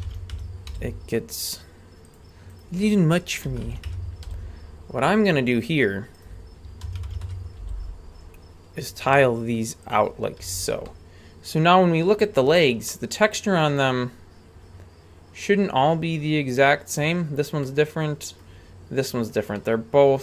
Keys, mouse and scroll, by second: 0.7 g, 2.5 right click, 3.4 r, 4.2 g, 6.2 right click, 6.8 r, 7.6 g, 10.4 a, 10.8-12.6 middle drag, 12.9-17.0 middle drag, 17.6 middle click, 19.5-20.2 middle drag.